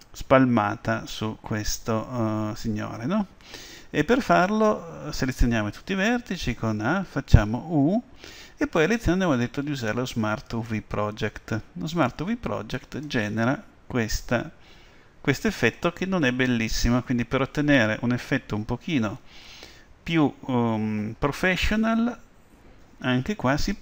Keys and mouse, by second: 6.1 a, 7.6 u.